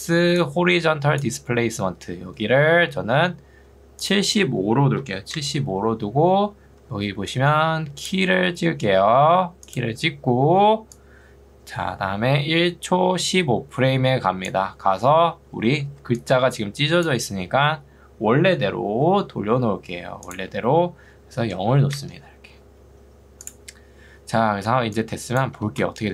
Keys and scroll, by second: 0.2 ctrl+2, 3.2 Escape, 4.8-5.7 typing, 6.8 ctrl+2, 9.2 Escape, 16.0 ctrl+2, 19.4 Escape, 21.8 0, 22.0 Return, 25.6 space.